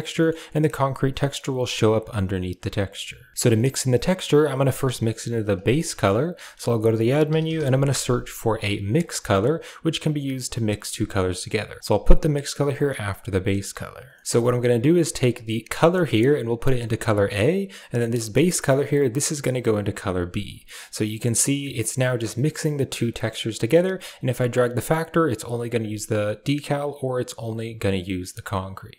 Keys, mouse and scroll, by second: 3.4 middle click, 4.3 click, 4.7 g, 5.5 middle click, 6.2 shift+a, 11.8-13.4 drag, 14.0 middle click, 14.5 drag, 15.7 click, 15.8-17.7 drag, 17.8 click, 18.8-20.4 drag, 20.6 click, 21.5-22.5 middle drag, 22.8 middle click, 23.9 click, 24.0-26.1 right drag, 26.7-28.9 drag.